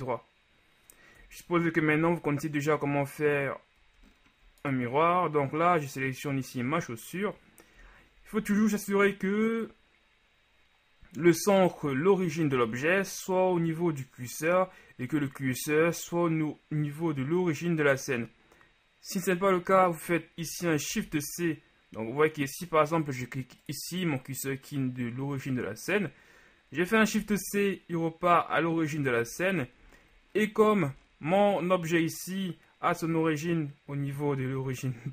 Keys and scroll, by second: 1.4 KP_Divide, 8.0 KP_1, 8.6 shift+KP_1, 21.1 shift+c, 27.3 shift+c.